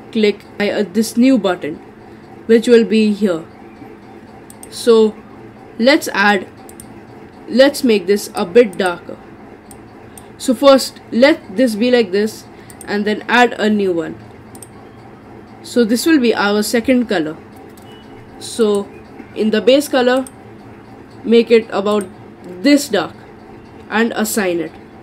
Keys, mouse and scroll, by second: 0.6 click, 4.5-6.8 drag, 12.7-17.6 drag, 18.6 click, 24.3-25.0 drag.